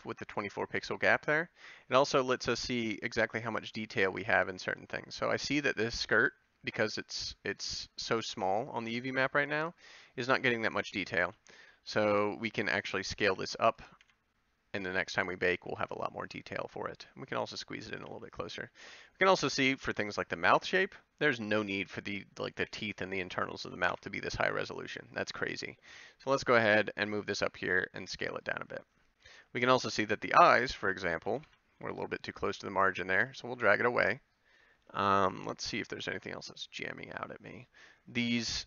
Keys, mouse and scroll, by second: 1.8 Tab, 11.2 Tab, 12.0 b, 13.3 g, 14.0 s, 15.7 g, 18.1 a, 21.4 c, 23.9 ctrl+l, 26.3 g, 27.7 s, 28.6 g, 29.6 a, 30.3 c, 31.4 ctrl+l, 32.4 g, 33.4 a.